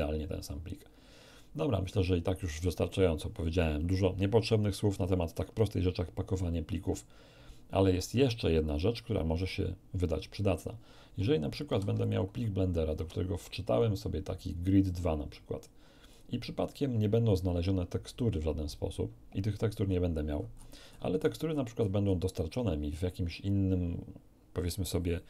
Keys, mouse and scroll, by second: 11.7 ctrl+n, 12.0 ctrl+click, 13.3 F1, 14.4 click, 16.1 click, 18.3-18.7 scroll up 1, 19.8 scroll down 1, 20.3 scroll down 1, 20.5 scroll up 1.